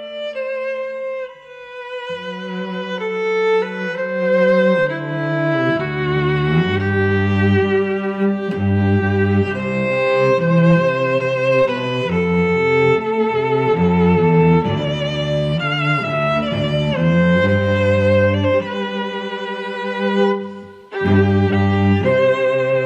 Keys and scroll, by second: 1.5 Delete.